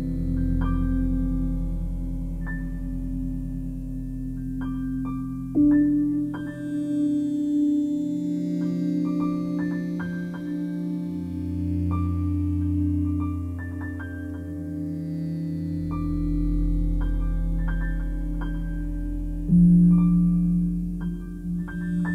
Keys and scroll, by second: 3.2 4, 3.4 Return, 16.9 BackSpace.